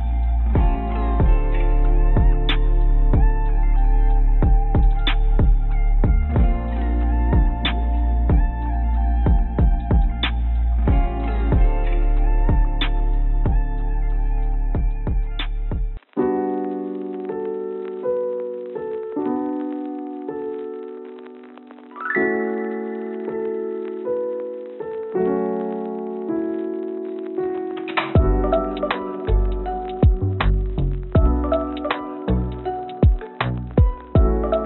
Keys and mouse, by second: 0.9 click, 5.1-6.8 drag, 8.0-10.1 drag, 15.4 click, 16.3-17.7 drag, 18.6 click, 20.0 ctrl+z, 21.0 click, 21.1-22.4 drag, 22.8 click, 23.8 click, 24.6 x, 30.9 click, 32.5 shift+d.